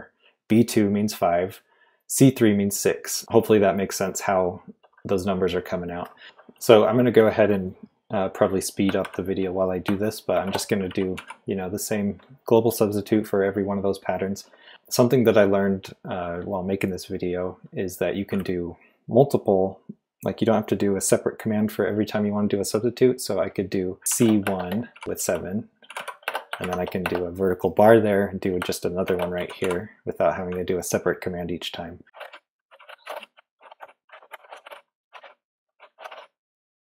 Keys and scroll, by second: 9.0 shift+;, 10.3-11.6 typing, 24.1-27.0 typing, 28.8-30.1 typing, 31.9-36.6 typing.